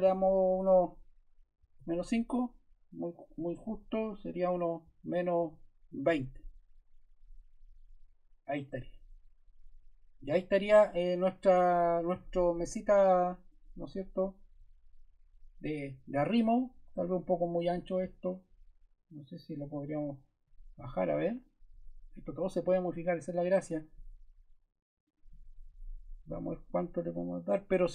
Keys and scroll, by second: 1.5 -, 3.6 BackSpace, 5.3 2, 6.0 0.